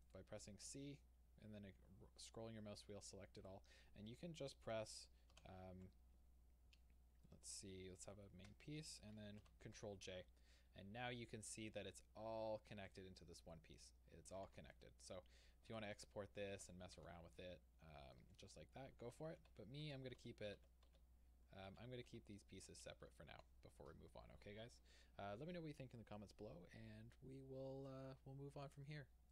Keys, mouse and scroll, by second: 0.1 right click, 3.4 c, 3.5 right click, 7.3 middle click, 8.0 shift+click, 9.5 ctrl+j, 12.9 click, 13.5 Tab, 13.8-17.3 middle drag, 14.5 alt+a, 15.7 Tab, 17.0 alt+a, 18.2 Tab, 19.3 ctrl+z, 22.3-29.3 middle drag, 23.4 alt+a.